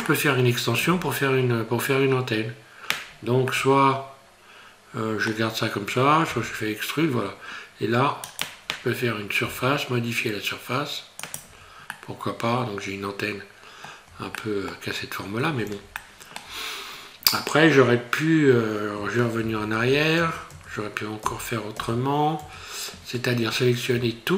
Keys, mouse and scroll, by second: 0.0 middle click, 3.1 scroll up 2, 3.5 middle click, 6.3 e, 9.4 s, 11.5 Tab, 12.0 middle click, 14.1 Tab, 14.4 middle click, 15.0-15.8 scroll up 2, 16.0 shift+middle click, 19.5 ctrl+z, 19.8 ctrl+z, 20.2 ctrl+z, 20.5 ctrl+z, 21.2 ctrl+z, 21.8 ctrl+z, 22.4 ctrl+z, 23.5-23.8 scroll up 2.